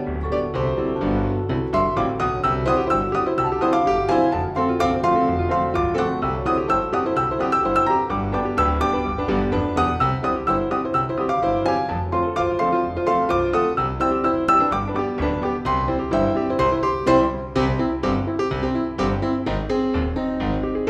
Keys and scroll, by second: 0.1 shift+F2, 0.3 F3, 5.3 F2, 10.0 Escape, 10.5 F4, 13.6 Delete, 14.3 F4, 14.7 Escape, 15.4 Delete, 16.6 F2, 18.5 F6, 18.8 Escape.